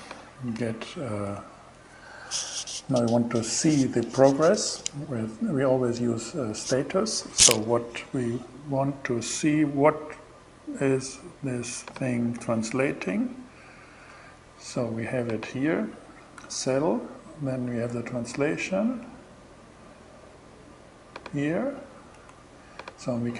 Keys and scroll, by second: 0.8 Left, 12.5 Return, 15.8 Return, 21.6 Return, 23.2 Return.